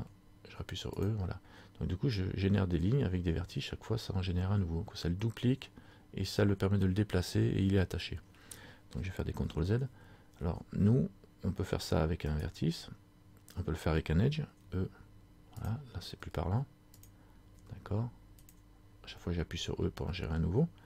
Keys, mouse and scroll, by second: 1.2 click, 9.6 ctrl+z, 12.4 shift+right click, 14.8 e, 17.1 click, 17.8 e.